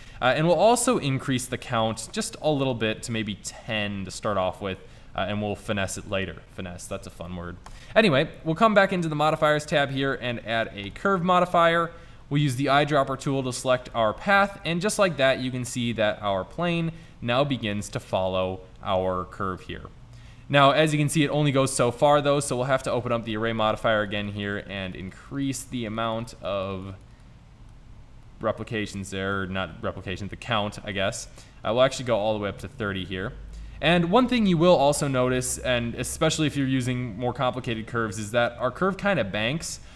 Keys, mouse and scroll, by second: 4.0-4.8 middle drag, 14.5-20.3 middle drag, 20.7-22.3 drag, 28.9-30.5 middle drag, 30.8-32.9 middle drag, 32.9-35.1 drag, 35.1-37.2 middle drag.